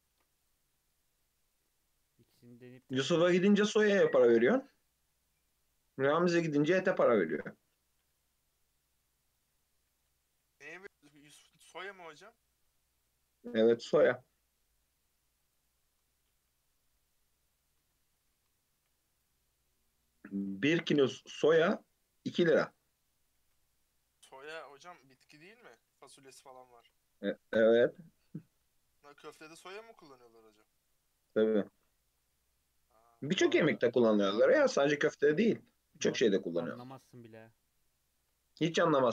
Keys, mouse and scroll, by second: 0.1 ctrl+r, 2.9 Tab, 3.1-3.6 middle drag, 3.6 scroll down 1, 3.7-5.0 middle drag, 5.0-5.5 scroll down 2, 5.5-6.6 middle drag, 6.6 /, 7.4 /, 9.2 click, 10.8 alt+h, 11.3 click, 11.6 scroll down 1, 11.7-13.3 middle drag, 13.3-13.7 scroll up 2, 13.7-15.4 middle drag, 15.4 click, 16.8 KP_3, 17.4-18.1 scroll up 2, 18.1 Tab, 18.3 alt+z, 18.7 1, 19.2 click, 21.2 g, 23.2 Tab, 23.5 alt+z, 24.5 Tab, 25.1 alt+z, 25.9 1, 26.6 shift+middle click, 27.1 scroll down 1, 27.7 click, 29.8 g, 31.5 Tab, 31.7 alt+z, 32.3-33.4 middle drag, 33.4 click, 33.7-34.3 scroll down 3, 34.3-36.0 middle drag, 36.0-36.6 scroll up 2, 36.6 middle click, 37.4 KP_3, 38.5 shift+middle drag, 38.8 scroll up 2, 38.9 Tab.